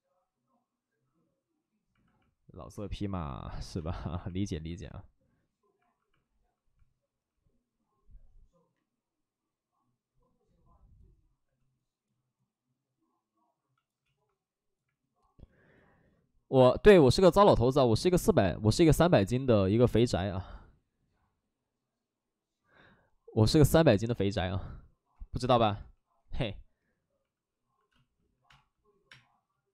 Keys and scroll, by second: 3.7 space, 27.8 space, 28.2 3, 28.4 space, 29.0 space.